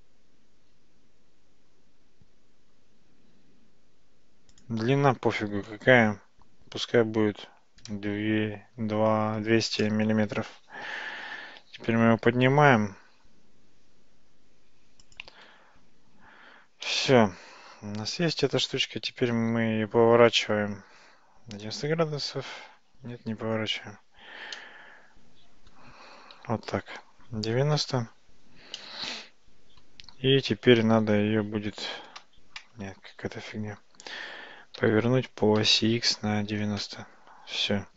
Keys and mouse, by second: 4.5-10.6 drag, 11.9 g, 16.9-18.6 middle drag, 19.4 g, 24.6-25.8 middle drag, 26.4 r, 28.8-29.9 middle drag, 33.4 ctrl+z, 35.7 r.